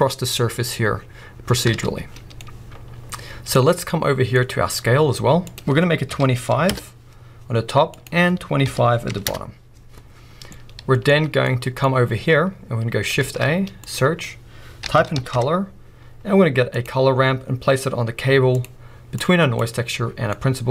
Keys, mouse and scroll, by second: 1.7 alt+a, 6.9 Return, 9.4 Return, 10.7-18.7 middle drag, 16.9 shift+a, 18.7 click, 19.2 click.